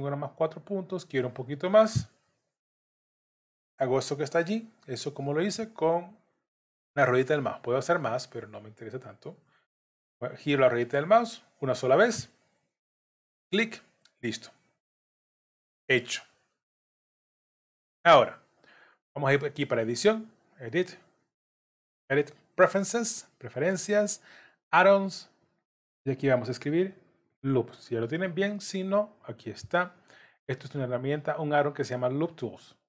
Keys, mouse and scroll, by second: 15.6 middle click, 16.5-16.9 scroll up 1, 19.7 click.